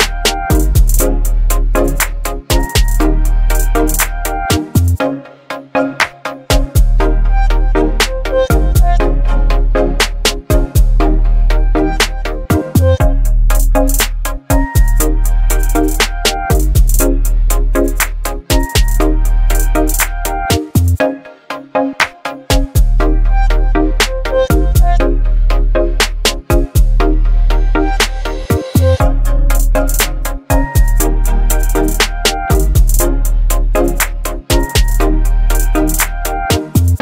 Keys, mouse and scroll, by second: 3.2 Right, 3.2 click, 5.8 b, 6.5 right click, 7.5 click, 8.7-10.0 alt+right drag, 10.8-11.7 drag, 18.7 right click, 19.9 click, 22.3 click, 24.6 click, 27.3 click, 30.3 right click, 31.2 click, 32.5 shift+click, 33.5 ctrl+g.